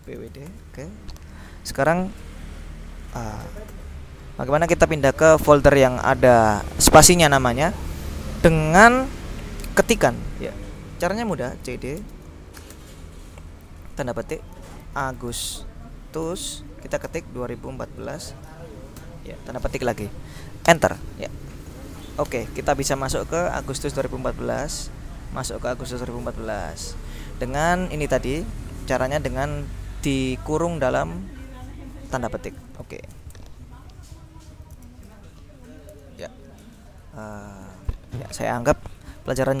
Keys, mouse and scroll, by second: 0.0-0.9 typing, 3.2 ctrl+l, 3.7 ctrl+s, 3.8 ctrl+Return, 5.9-7.8 drag, 11.5-12.8 typing, 14.6-19.0 typing, 20.7 Return, 21.5-22.6 typing, 25.7-27.8 drag, 28.5-31.4 drag, 32.8 click, 35.0 alt+Tab, 36.0 alt+Tab, 37.4 click.